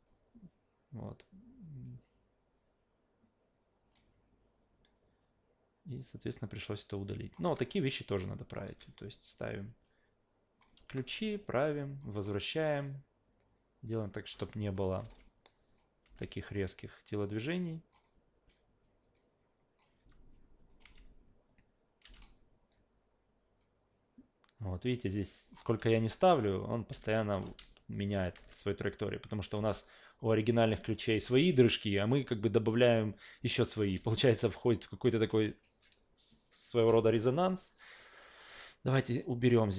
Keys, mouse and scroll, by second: 0.0-7.3 drag, 7.4 s, 7.7-8.5 drag, 8.7 e, 9.8 click, 10.8 s, 11.4-12.0 drag, 12.8 click, 14.3 s, 14.9 click, 15.0 alt+v, 16.1 alt+v, 16.3-17.9 drag, 19.0 click, 20.0 s, 20.7 click, 20.8 alt+v, 22.0 alt+v, 22.1-25.5 drag, 25.8 alt+v, 27.0 alt+v, 27.3 click, 27.4 alt+v, 28.3 alt+v, 29.5 alt+g, 30.1 click, 30.5 a, 30.9 click, 31.1 f, 32.0 click, 32.7 click, 33.8 click, 34.0 alt+v, 34.7 alt+middle click, 36.9 alt+v, 37.8-38.4 drag, 39.1 click.